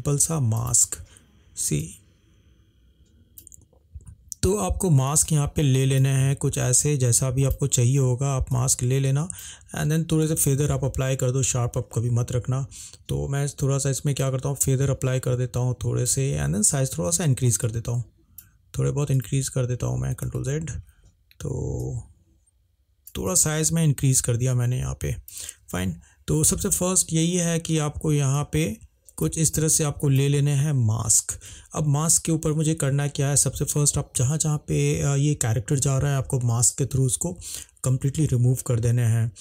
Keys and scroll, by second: 20.4 ctrl+z.